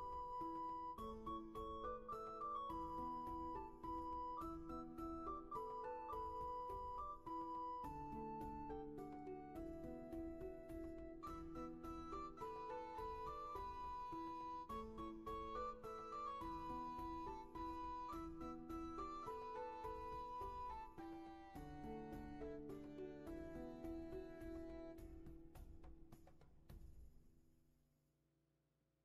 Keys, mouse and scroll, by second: 1.9 ctrl+z, 3.7 ctrl+z, 6.4 ctrl+shift+z, 7.9 ctrl+shift+z, 9.7 ctrl+z, 17.0 ctrl+z, 23.0 shift+space.